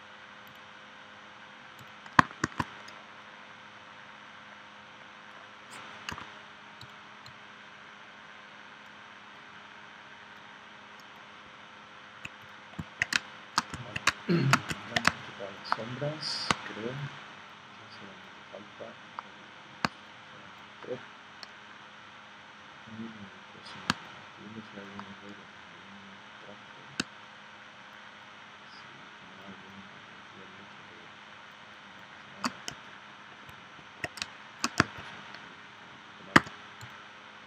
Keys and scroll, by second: 2.4 shift+c, 6.2 a, 13.1 space, 14.0 space, 15.0 space, 16.5 space, 19.8 space, 23.9 space, 27.0 space, 34.2 space, 36.4 v.